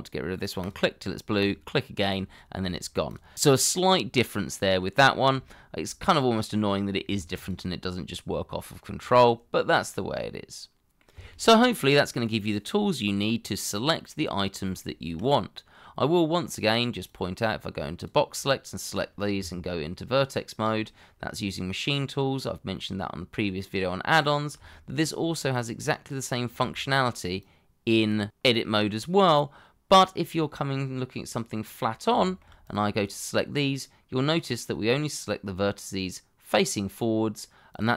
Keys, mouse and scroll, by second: 0.6 shift+click, 1.4 shift+click, 2.4 scroll down 1, 3.1 shift+click, 5.4 shift+middle click, 6.0-7.1 scroll up 1, 7.3 ctrl+click, 10.3 middle click, 19.4 Tab, 22.7 middle click, 24.7 shift+middle click, 27.4 shift+click, 29.2 middle click, 33.0 double click, 34.5 middle click.